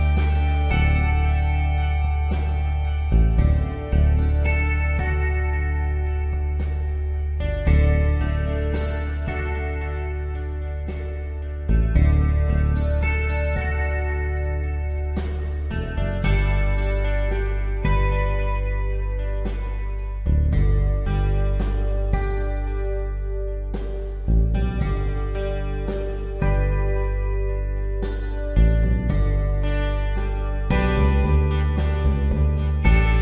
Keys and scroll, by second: 0.6 s, 5.2 space, 6.6 ctrl+z, 7.5 p, 8.9 ctrl+z, 10.8 ctrl+Return, 11.0 Delete, 13.1 s, 17.8 ctrl+d, 17.9 space, 18.3 v, 18.5 space, 21.9 space, 22.8 space, 23.2 s, 24.9 ctrl+alt+z, 26.7 ctrl+d, 27.0 v, 27.8 ctrl+0.